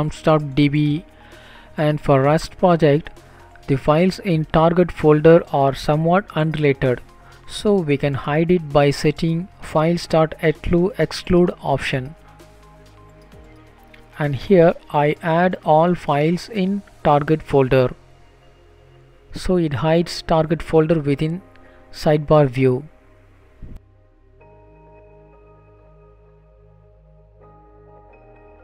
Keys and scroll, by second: 7.2 Up, 7.3 Up, 7.7 Up, 7.9 Up, 8.1 Up, 8.7 Down, 9.8 shift+End, 10.3 Delete, 10.9 Down, 11.2 shift+Delete, 11.5 Up, 12.0 BackSpace, 12.4 Left, 12.7 Left, 12.8 Left, 12.8 Left, 15.4 BackSpace, 23.9 ctrl+s.